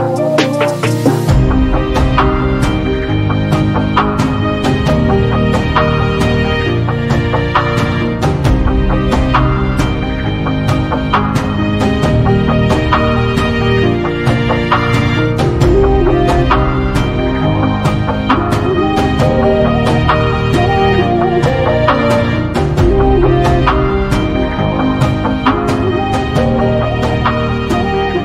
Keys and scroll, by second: 1.9 space, 9.6 p, 12.0 1, 12.3 5, 12.7 Return, 13.3 space, 25.4 m, 27.8 space.